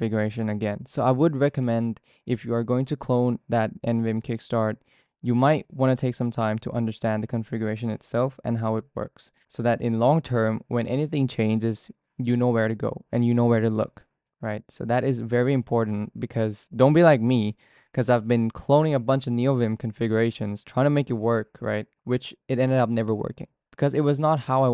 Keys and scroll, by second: 0.0-1.8 typing, 5.8-9.9 typing, 7.1 Return.